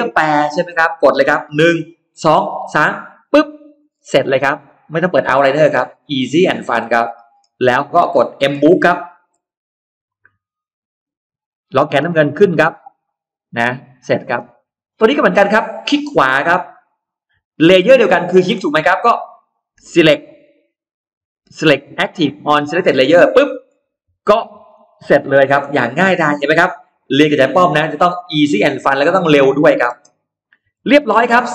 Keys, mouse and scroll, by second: 3.1 click, 3.7-4.3 scroll down 1, 4.4 scroll up 1, 4.5-6.0 middle drag, 6.2-6.6 scroll down 1, 6.6-8.0 scroll up 3, 7.8 middle click, 9.2 m, 9.9 click, 10.8 Up, 12.2 click, 12.6 middle click, 12.6-13.0 scroll down 1, 14.1 middle click, 14.2 space, 14.7 click, 15.6 right click, 23.0 click, 23.6 middle click, 24.2-24.6 scroll down 1, 24.7-25.4 scroll up 1, 25.5 m, 26.2 click, 26.7 Up, 27.4 Up, 28.0 click, 28.4 middle click, 28.6-30.0 scroll down 4, 29.7 space, 30.1 click, 30.5-30.8 scroll up 1, 31.0-31.5 middle drag.